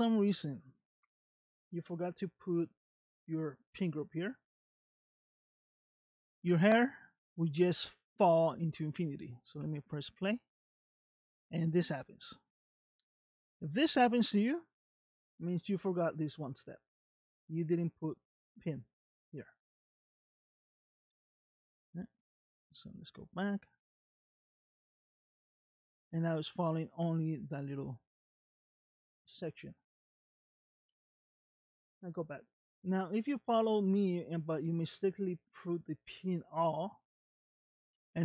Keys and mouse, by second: 5.1 click, 6.9 middle click, 9.6 space, 10.7 space, 11.2-12.4 middle drag, 13.0 middle click, 17.7-19.3 drag, 20.3 space, 22.2 space, 23.2 click, 23.8 space, 25.2 space, 26.1 middle click, 27.8-29.1 middle drag, 29.3 space, 30.0 space, 31.0 click, 35.1-36.3 drag.